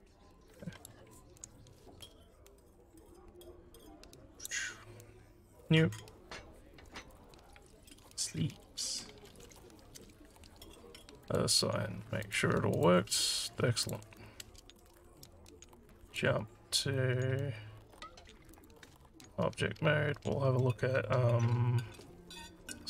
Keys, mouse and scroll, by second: 4.3 click, 5.6 click, 7.1 click, 8.2-10.0 typing, 11.2 click, 12.2 click, 12.7 click, 13.9 click, 16.1 click, 18.6 click, 22.0 z.